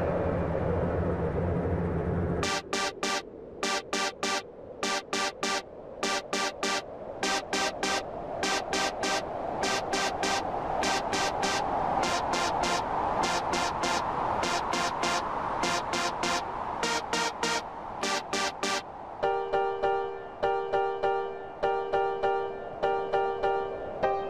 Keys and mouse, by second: 1.1 click, 2.5 click, 3.7 click, 5.3 click, 6.9 click, 8.6 click, 10.1 click, 11.5 click, 12.4 click, 14.0 click, 14.7 click, 15.9 click, 17.3 click, 18.3 click, 20.1 click, 20.9 click, 21.9 x, 22.4 click.